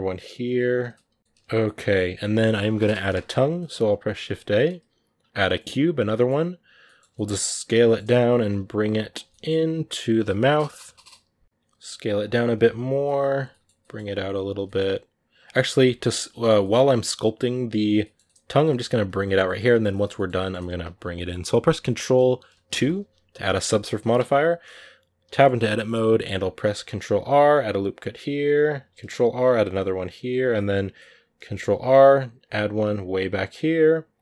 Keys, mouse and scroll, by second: 0.7 middle click, 1.2 shift+c, 1.4-3.3 middle drag, 3.3 scroll up 1, 3.3-5.5 middle drag, 5.5 shift+a, 5.7 scroll down 3, 5.9-7.6 middle drag, 7.6 g, 8.1 s, 9.0 g, 10.6 KP_Decimal, 11.4 s, 12.3 s, 13.3 middle click, 13.5 s, 14.4 g, 15.4-16.6 shift+middle drag, 16.6 g, 17.8 middle click, 18.4-18.7 scroll down 1, 18.7 s, 19.2-20.5 middle drag, 20.5 s, 20.9-22.5 middle drag, 22.5 ctrl+2, 23.8 middle click, 23.9 Tab, 25.1-26.7 middle drag, 26.7 ctrl+r, 28.7 ctrl+r, 30.3 middle click, 31.2 ctrl+r.